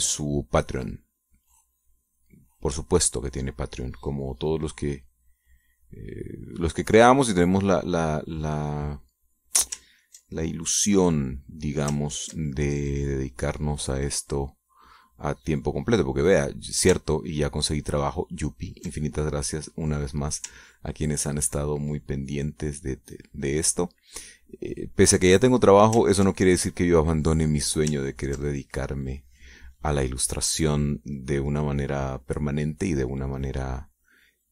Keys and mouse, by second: 4.5 middle click, 5.7-8.9 drag, 10.7 ctrl+click, 12.7 ctrl+click, 13.6-17.3 drag, 19.2 ctrl+click, 20.1 click, 21.3 ctrl+click, 21.9 ctrl+click, 22.6-26.5 ctrl+drag, 26.7 ctrl+click, 27.1-28.4 ctrl+drag, 28.6 ctrl+click, 29.1-30.3 ctrl+drag, 30.5 middle click, 30.7-32.5 drag, 32.6 click, 33.7-34.5 drag.